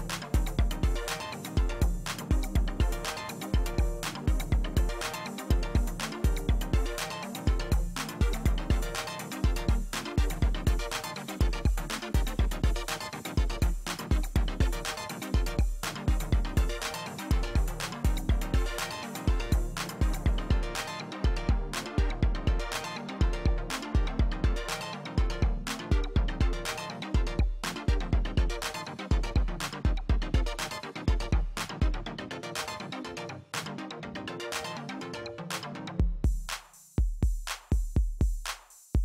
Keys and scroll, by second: 0.9 ctrl+d, 10.3 ctrl+alt+z, 15.2 ctrl+alt+z, 25.6 ctrl+d, 33.8 space, 38.8 space.